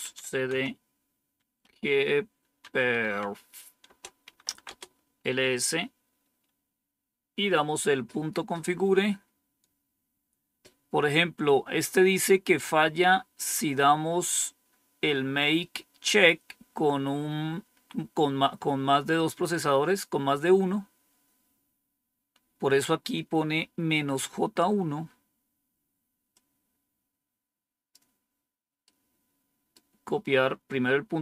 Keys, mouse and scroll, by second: 0.0-4.7 typing, 3.8 Return, 9.6-10.3 scroll down 1, 25.0-26.3 scroll up 1, 26.3-27.9 drag, 28.8-30.3 right drag.